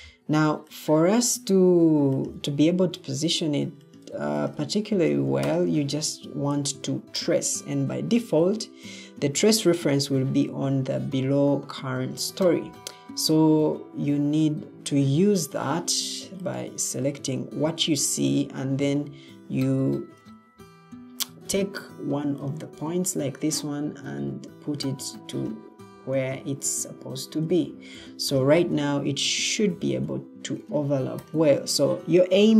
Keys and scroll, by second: 11.8 Escape, 12.3 Escape, 20.2 ctrl+d.